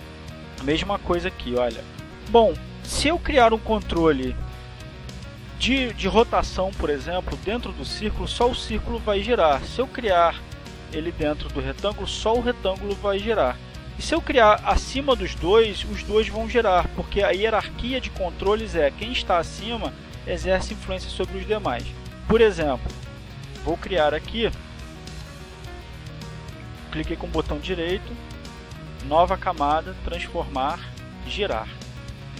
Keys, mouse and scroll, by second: 3.7 click, 4.0 click, 8.0 click, 12.6 click, 28.6 right click, 29.2 click, 29.7 click, 30.8 right click.